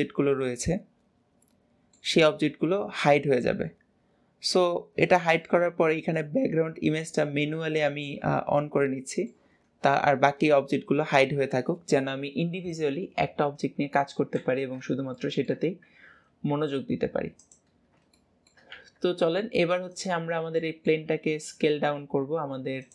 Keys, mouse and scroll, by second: 7.2-8.6 drag, 8.6-11.7 middle drag, 14.0 scroll up 2, 14.4 alt+z, 15.2-15.8 shift+middle drag, 15.8 scroll up 2, 20.6-21.2 middle drag.